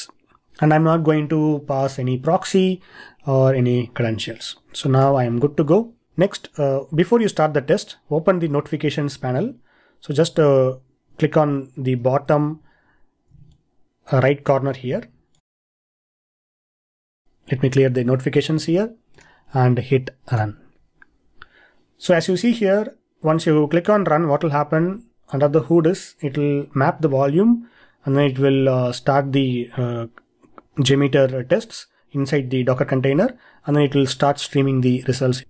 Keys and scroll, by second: 12.3 ctrl+e.